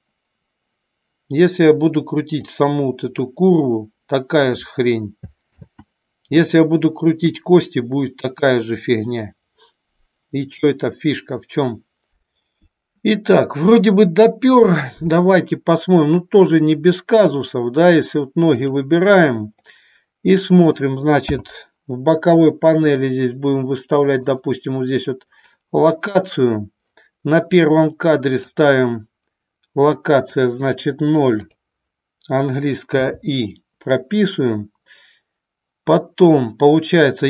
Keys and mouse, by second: 2.5-4.5 drag, 6.0 ctrl+z, 17.9 click, 19.7-20.5 middle drag, 21.4 n, 24.4 click, 28.4 click, 30.2-31.6 drag, 33.0 i.